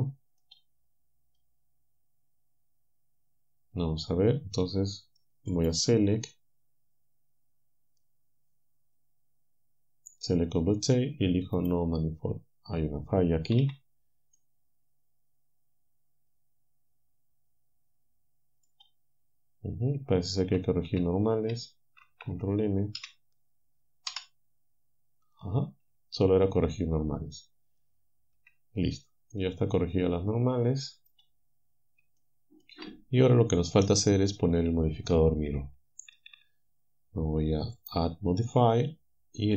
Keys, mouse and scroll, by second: 5.6 click, 11.6 click, 13.6 z, 14.4-18.9 drag, 20.5 a, 22.1 ctrl+n, 23.0 a, 24.1 z, 28.4 Tab, 29.3-31.3 drag, 32.2 shift+click, 37.8 click.